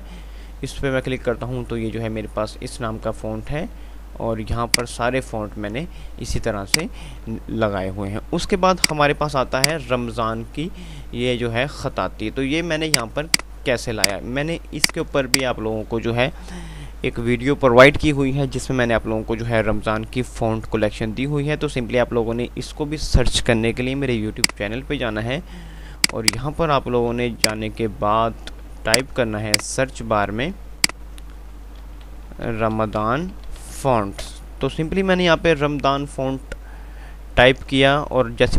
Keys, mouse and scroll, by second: 8.4 F5, 8.8 ctrl+click, 9.1 typing, 9.6 F2, 9.8 click, 10.1 F2, 13.1-18.9 drag, 24.6 click, 31.8-34.3 typing, 34.5 Return, 36.4 typing.